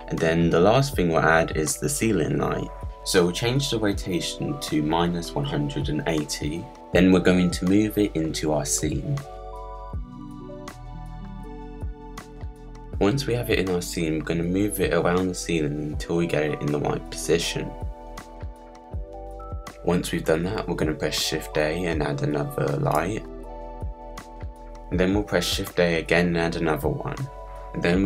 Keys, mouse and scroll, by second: 1.3 click, 1.9 KP_Decimal, 2.3 click, 4.2-7.8 drag, 7.9-9.6 scroll down 20, 9.3 middle click, 9.6 click, 10.1 middle click, 10.2-10.8 scroll down 5, 10.3 KP_Decimal, 10.8 click, 11.8 click, 11.9 middle click, 12.1 click, 12.2 scroll up 2, 12.3 click, 12.9 click, 14.4 click, 16.1-18.6 drag, 18.7-19.3 drag, 19.3 s, 19.8 click, 21.1 alt+d, 23.6 click, 24.2-24.6 drag, 25.1 alt+d.